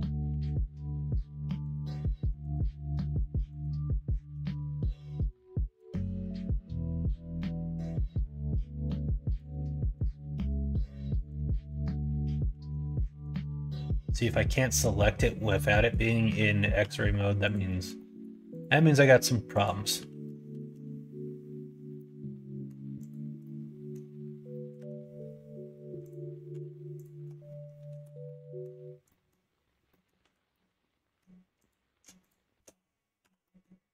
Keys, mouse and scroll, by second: 0.2 1, 0.5 middle click, 1.6 click, 2.4 click, 3.1 alt+z, 3.5 click, 4.1 alt+z, 5.1 click, 6.2 g, 9.4 middle click, 10.4 click, 10.7 middle click, 11.2 click, 11.5 alt+z, 11.9 click, 12.5 alt+z, 13.0 middle click, 13.4 g, 15.0 click, 15.7 middle click, 16.4 middle click, 16.7 g, 17.7 middle click, 18.0 middle click, 18.5 click, 18.7 middle click, 19.5 click, 20.0 alt+z, 20.5 alt+z, 21.9 middle click, 22.9 click, 23.4 middle click, 24.7 k, 28.2 middle click, 29.0 middle click, 29.9 middle click, 30.2 2, 30.4 middle click, 31.5 click, 32.2 click, 33.4 middle click, 33.4 f.